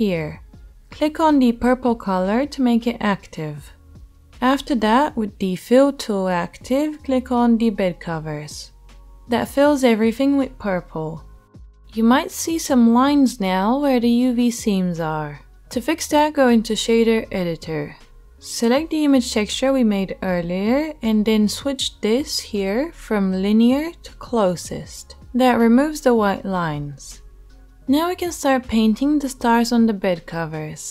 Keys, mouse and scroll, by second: 3.1 middle click, 3.3 click, 4.1-7.7 middle drag, 7.7-30.9 drag.